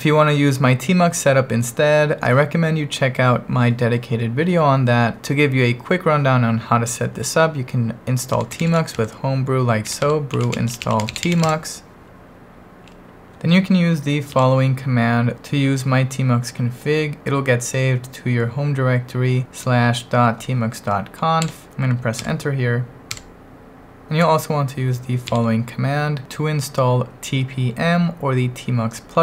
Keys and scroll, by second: 0.0-0.1 typing, 8.1-11.8 typing, 13.4 ctrl+1, 14.3 super+v, 21.4 Escape, 22.2 Return, 23.2 Return, 25.3 super+v.